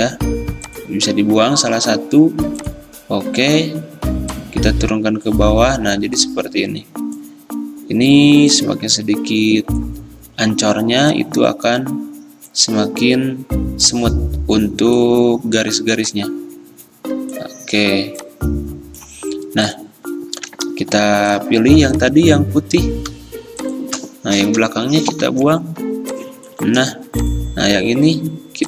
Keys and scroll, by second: 21.0 v, 24.2 v, 25.3 m, 27.1 v.